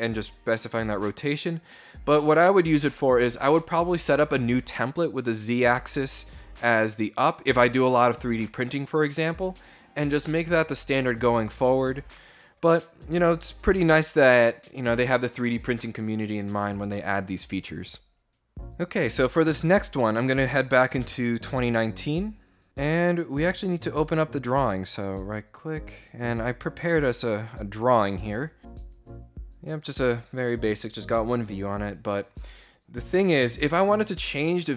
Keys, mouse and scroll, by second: 20.6 alt+Tab, 24.2 right click.